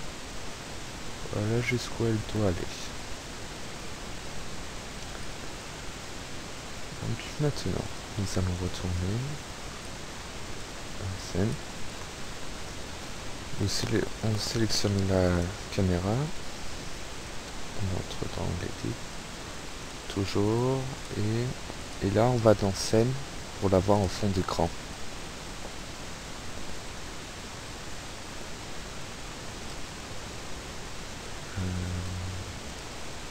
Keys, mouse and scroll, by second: 3.0 alt+a, 4.4 Escape, 5.3 click, 7.7 click, 8.6 click, 9.7 click, 10.8-11.5 scroll down 3, 11.6 click, 11.7 middle click, 12.7 KP_0, 14.4 right click, 15.4 click, 17.3 click, 19.2 click, 19.7 click, 20.6 click, 21.0 click, 21.9 click, 24.0 click, 24.7 click, 29.7 click, 30.9 click, 32.1 click, 32.8 click.